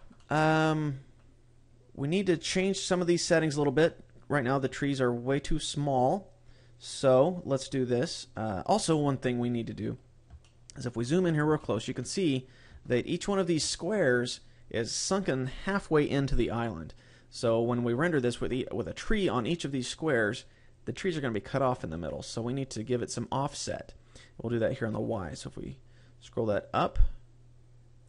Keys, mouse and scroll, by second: 0.0 middle click, 3.7 middle click, 6.8-7.9 scroll down 3, 8.7-9.1 scroll up 4, 9.8 scroll up 2, 10.3 shift+middle click, 11.1-11.5 scroll up 2, 11.5 shift+middle click, 12.0 middle click, 12.8 shift+middle click, 13.5 middle click, 25.0 click.